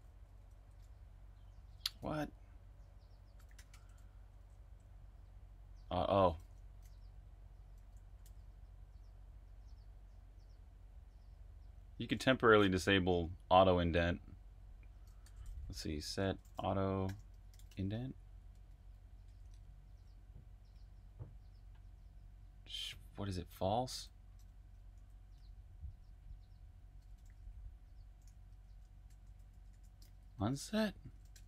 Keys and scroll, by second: 0.0-5.0 typing, 0.9 super+v, 7.7-8.2 typing, 15.2-18.0 typing, 19.4 space, 24.9-25.3 typing, 27.0-29.6 typing.